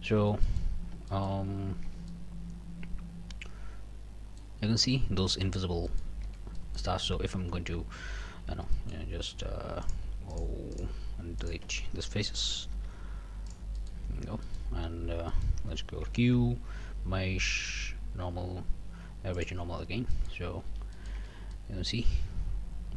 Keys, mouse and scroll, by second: 0.2 Tab, 0.4 click, 0.7 scroll up 3, 1.1 shift+click, 1.4 shift+scroll down 2, 1.9 Tab, 2.1-4.6 drag, 5.9 click, 6.2 Tab, 6.5 click, 7.0 q, 8.3 a, 8.7 click, 9.3 click, 9.8 shift+click, 10.3 shift+click, 10.7 shift+click, 11.4 shift+click, 12.7 x, 13.5 click, 13.8 middle click, 14.1 scroll down 1, 14.4 middle click, 15.0 a, 15.3 click, 16.0 q, 19.4 click, 19.8 scroll up 1, 20.1 click, 20.7 alt+a, 20.9 alt+click, 21.2 alt+Tab, 21.2 alt+middle click, 21.5-22.9 alt+middle drag.